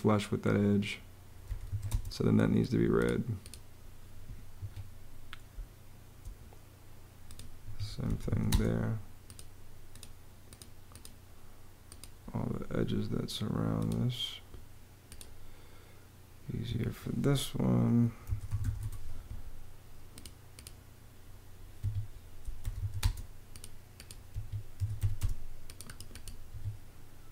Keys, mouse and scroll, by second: 0.9-1.9 typing, 4.3 Escape, 5.2 space, 7.3 Escape, 7.5-8.4 typing, 16.2 Escape, 17.7-18.9 typing, 21.5 Escape, 22.0-22.9 typing, 24.0 Escape, 24.2-25.2 typing, 26.2 Escape.